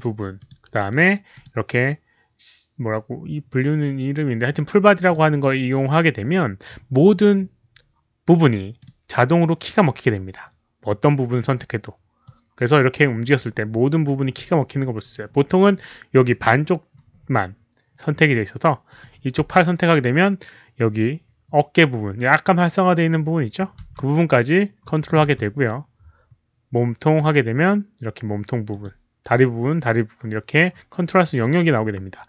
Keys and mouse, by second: 0.0-0.2 typing, 0.3 alt+click, 0.8 alt+click, 1.3 alt+click, 2.2 click, 5.0 click, 5.7 click, 8.7 click, 11.1 click, 12.2-14.3 drag, 16.1 click, 18.8 click, 19.3 w, 23.8 click, 23.8 w, 23.9-25.0 middle drag, 24.6 w, 25.0 click, 26.1-26.8 typing, 26.3 middle click, 26.3 click, 27.0 click, 28.6 click.